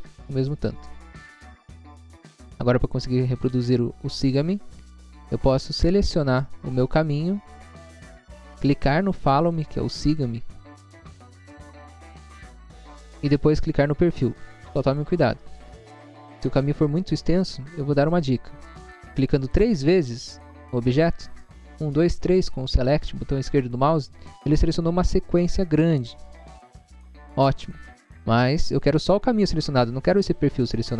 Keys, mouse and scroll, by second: 1.6 scroll down 1, 2.6 click, 2.9 scroll down 1, 3.9-4.2 scroll down 1, 6.7 scroll down 1, 9.5 click, 14.9 click, 15.5 scroll up 1, 16.1 scroll up 1, 19.1 click, 19.7 double click, 19.8 double click, 23.5 scroll down 1, 24.1 scroll down 1, 27.4-28.1 scroll up 2.